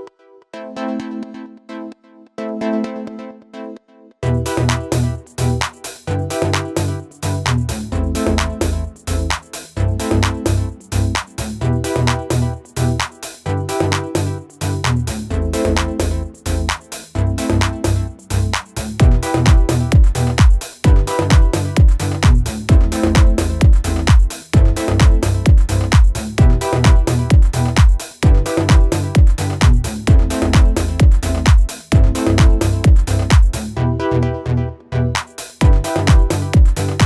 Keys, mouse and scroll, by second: 5.2 click, 35.8 click.